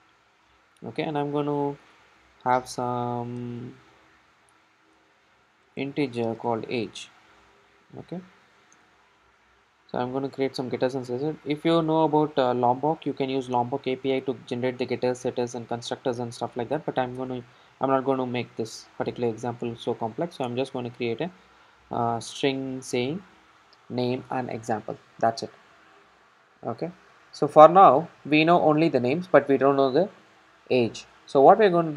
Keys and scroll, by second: 1.9 Return, 9.0 super+n, 18.6 super+n, 20.6 super+n.